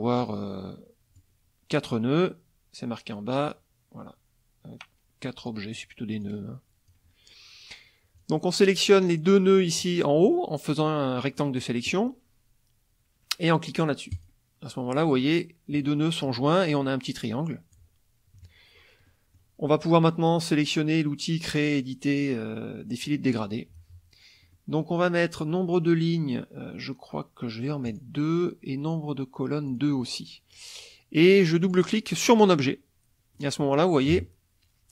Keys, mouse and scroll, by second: 0.2-1.3 drag, 5.4 click, 6.2 click, 8.2 click, 9.9-11.7 drag, 14.1 click, 18.3 KP_Subtract, 19.0 middle click, 23.0 click, 24.5 middle click, 27.8 click, 29.7 click, 31.6 click, 33.3 middle click, 33.7 middle click.